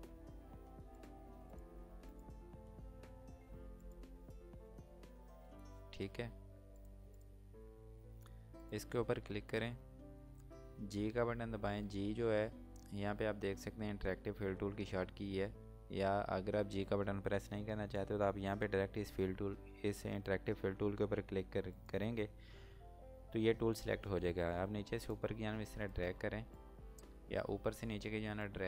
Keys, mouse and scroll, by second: 1.0 click, 2.7 scroll down 1, 3.1 scroll up 1, 3.9 click, 4.2 scroll down 1, 5.3 scroll up 1, 6.7 click, 9.1 scroll up 1, 9.6 scroll down 1, 11.9 g, 21.7 g, 21.8 click, 25.1 click.